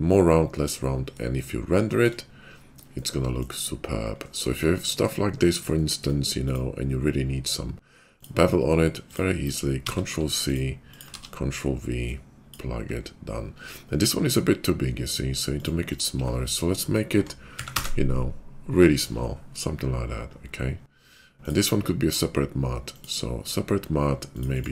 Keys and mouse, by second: 6.4 click, 6.5-9.1 middle drag, 9.1 click, 9.8 ctrl+c, 10.4 click, 10.9 click, 11.0 ctrl+v, 12.3-21.5 drag, 21.5-23.0 middle drag, 23.0-24.7 drag.